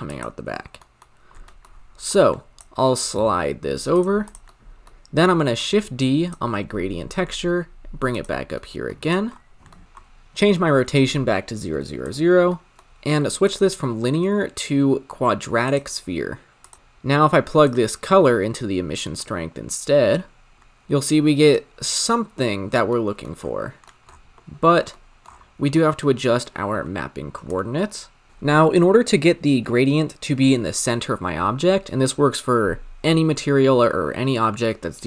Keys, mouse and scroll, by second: 0.0 click, 0.4 scroll down 4, 0.9-2.0 middle drag, 2.0 click, 4.2-6.3 drag, 6.7 shift+d, 8.6 middle click, 9.0 click, 9.5 scroll up 5, 9.8-12.2 drag, 12.4-13.5 middle drag, 13.5-16.7 drag, 17.6-20.5 drag, 20.5-21.4 scroll down 1, 21.4 click, 27.6 shift+click, 28.3-32.6 scroll up 2.